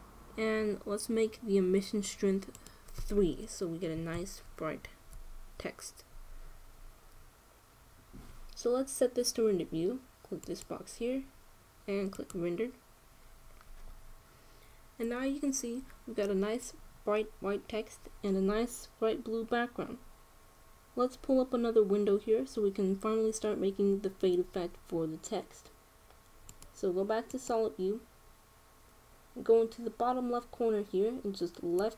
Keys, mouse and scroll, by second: 3.2-5.2 drag, 11.1-13.1 drag, 27.2-29.1 drag.